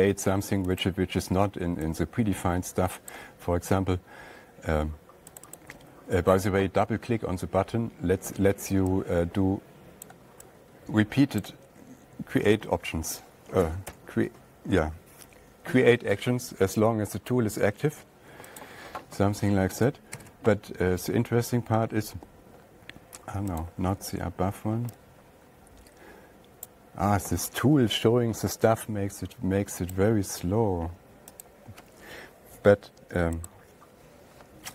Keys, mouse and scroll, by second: 6.0 click, 10.5 click, 11.9 click, 14.3 ctrl+z, 17.3 Escape, 19.1 click, 20.6 ctrl+a, 24.1 click, 27.1 click, 30.4 right click, 34.0 click.